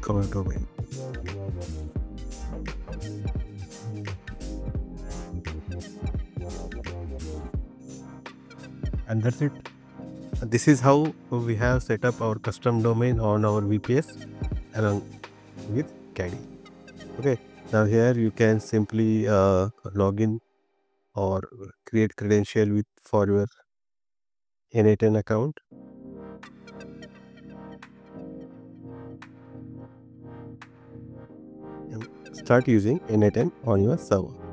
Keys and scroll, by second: 2.6 BackSpace.